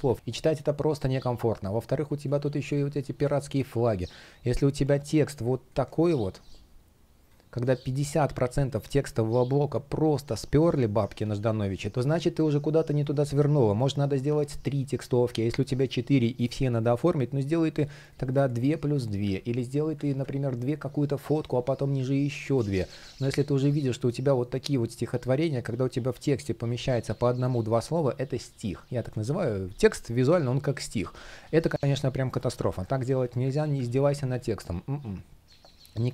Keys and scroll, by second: 2.0 space, 2.9 shift+p, 10.9 super+z, 15.0 super+z, 15.4 space, 19.0 super+z, 19.8 super+z, 21.2 space, 22.5 super+z, 28.8 super+z, 30.5 super+z, 32.8 super+z, 34.0 super+z.